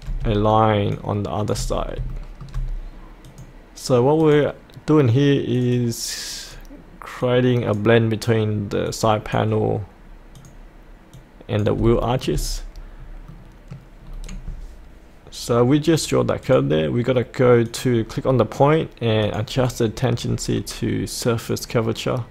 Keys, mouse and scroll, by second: 1.7 scroll up 1, 2.1 shift+middle click, 3.3-11.8 drag, 11.9 shift+middle click, 13.0-13.3 scroll up 1, 13.3 middle click, 14.1-16.4 scroll down 1, 16.4 click, 20.5-21.4 scroll down 1, 21.4 click.